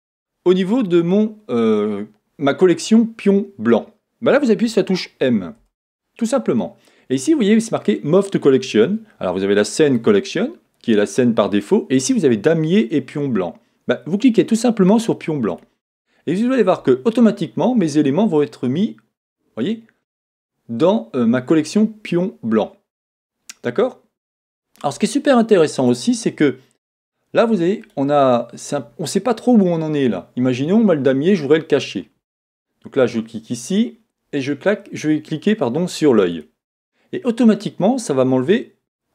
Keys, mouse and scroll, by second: 33.1 click.